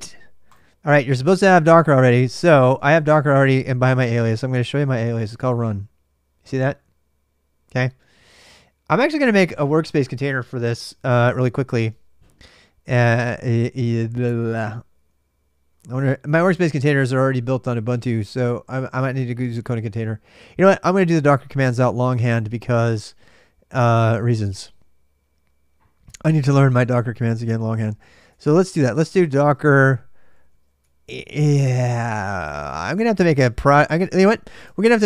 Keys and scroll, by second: 0.0-34.4 typing.